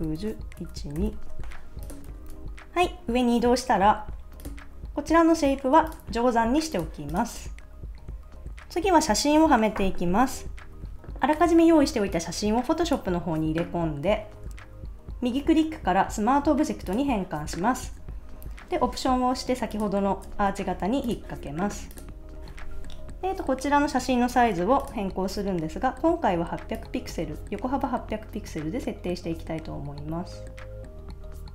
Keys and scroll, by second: 2.2 super+s.